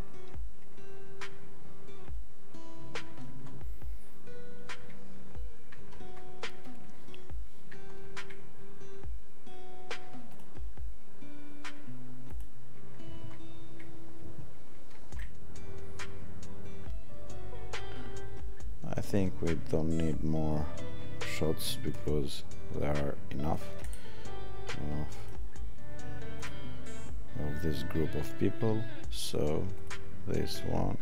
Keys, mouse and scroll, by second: 3.0 click, 5.7 click, 19.0 click, 26.5 click.